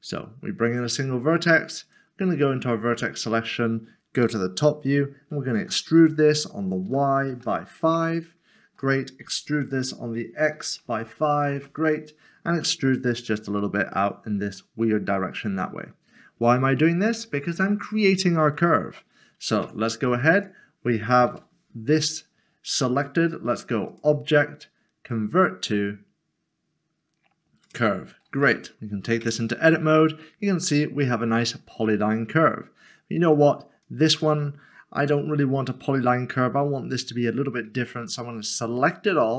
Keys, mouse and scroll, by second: 2.6 middle click, 3.3 scroll down 1, 4.3 typing, 5.6 typing, 6.8-7.4 typing, 7.9 Return, 9.2-11.0 typing, 11.5 Return, 12.5 typing, 13.9 e, 14.6 middle click, 19.6 Tab, 23.0 click, 27.6 click, 29.2 Tab, 33.3 click, 38.0 a.